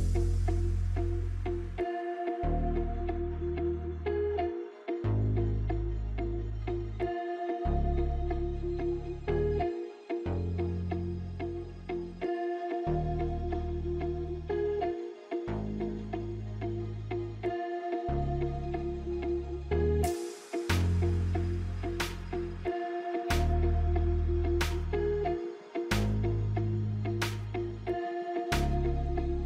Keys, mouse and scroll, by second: 3.4-9.2 drag, 9.8 scroll up 2, 10.5 alt+scroll down 1, 11.1-11.5 alt+scroll down 1, 11.6 alt+scroll up 1, 11.9 space, 12.2 click, 12.3 space, 13.0 click, 14.5 right click, 15.1-21.2 drag, 22.8-24.1 scroll down 1, 24.1-28.5 drag, 29.1 alt+scroll up 1.